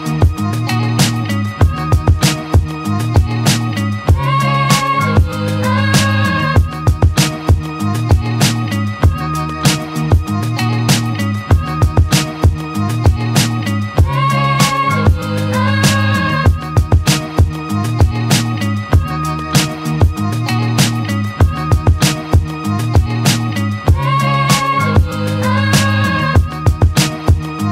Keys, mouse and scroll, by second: 0.7-1.9 alt+middle drag, 1.9 shift+click, 2.8 shift+click, 3.3 z, 4.2 z, 4.9 alt+click, 5.3 alt+right click, 5.6 alt+click, 5.9 alt+middle click, 6.3-9.6 alt+drag, 9.6 Tab, 10.3 alt+right click, 10.6 click, 10.8-11.7 alt+drag, 11.7 alt+middle click, 12.0-12.4 alt+right drag, 12.4 click, 13.8 click, 14.2 click, 14.9-15.5 right drag, 15.5 Tab, 15.9-16.6 alt+drag, 17.5 click, 17.9 click, 18.5 click, 19.1-20.2 drag, 20.4 Tab, 20.8 alt+click, 21.5 right click, 22.3 `, 22.7 z, 24.0-24.4 scroll up 2, 24.4 alt+middle click, 24.9 click, 26.0 shift+click, 27.5 shift+click.